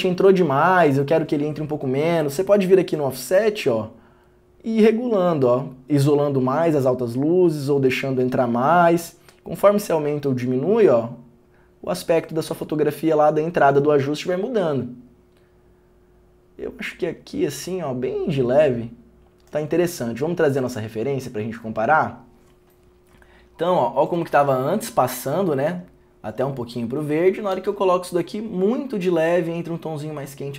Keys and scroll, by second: 27.7 ctrl+d.